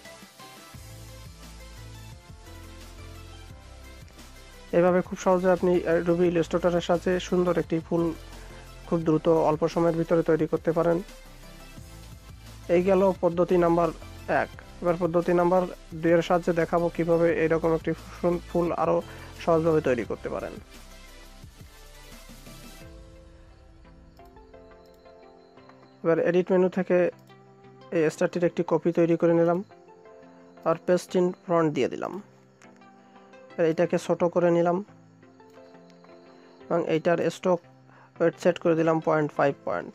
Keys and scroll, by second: 39.2 Return.